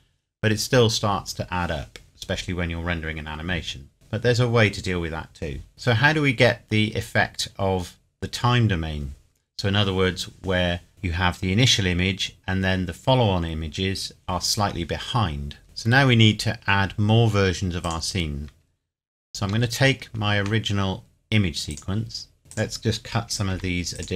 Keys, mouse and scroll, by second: 3.9-4.9 scroll down 1, 5.7-6.3 scroll up 1, 17.8 scroll up 1, 17.9 click, 19.5 shift+d, 21.7 click, 22.5 click, 23.5 Delete, 23.9 click.